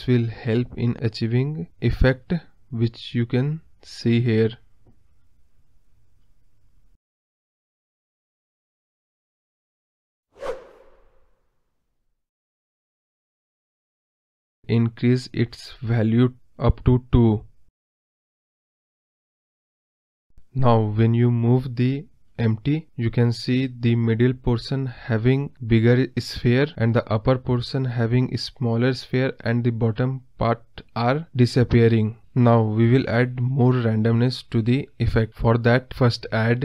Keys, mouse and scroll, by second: 1.6 scroll down 2, 2.2 scroll down 1, 4.9-14.1 drag, 14.1 scroll up 1, 14.3 scroll down 1, 16.1-18.9 drag, 19.2-19.6 scroll up 7, 19.6-20.0 middle drag, 20.0-21.6 scroll down 4, 21.6 g, 25.4 ctrl+z, 26.3 g, 30.1 ctrl+z.